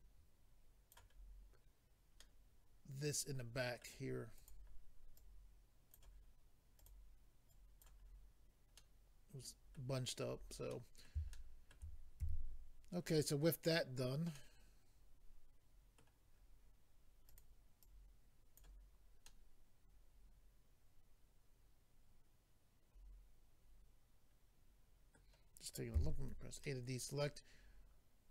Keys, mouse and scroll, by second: 1.1-2.2 scroll down 2, 2.2 middle click, 4.4 click, 5.2 click, 6.8 click, 6.9 click, 7.5 click, 8.0-8.5 scroll down 4, 8.8 middle click, 9.9-11.1 scroll down 5, 10.7 middle click, 11.3 shift+middle click, 12.2 typing, 14.3 middle click, 16.3-17.2 scroll up 3, 17.3 click, 17.8 click, 19.2 middle click, 25.9 a, 26.2 scroll down 3, 26.6 middle click.